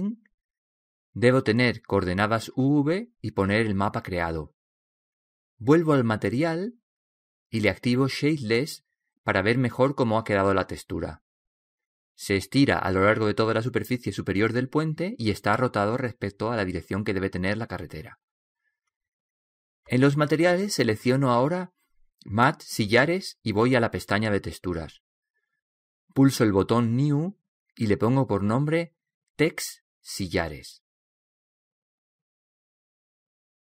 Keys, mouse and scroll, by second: 0.4 middle click, 3.8-5.6 drag, 7.6 middle click, 8.1-9.9 drag, 10.7-12.5 drag, 21.2-24.3 drag, 24.8-33.6 drag.